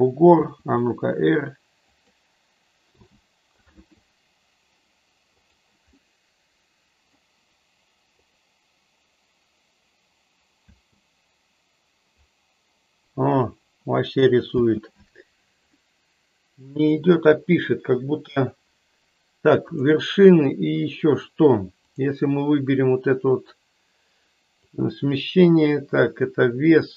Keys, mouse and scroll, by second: 0.4 r, 2.9 g, 3.6 click, 5.5 click, 6.1-7.3 middle drag, 8.3 click, 10.7 space, 14.6 space, 15.7-16.9 middle drag, 19.8-20.6 drag, 24.6-26.9 drag.